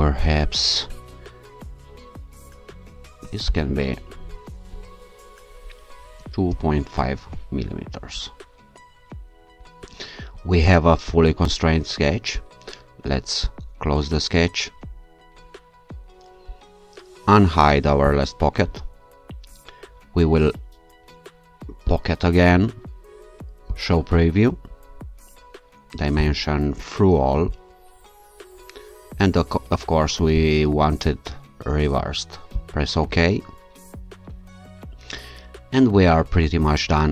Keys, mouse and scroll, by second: 3.7 shift+v, 6.2 2, 6.5 ., 7.0 5, 7.2 Return, 10.4-10.9 scroll down 2, 10.9-11.3 scroll down 1, 13.5 shift+click, 18.1 click, 21.9 click, 23.7 click, 26.2 click, 27.5 click, 30.4 click, 32.6 click.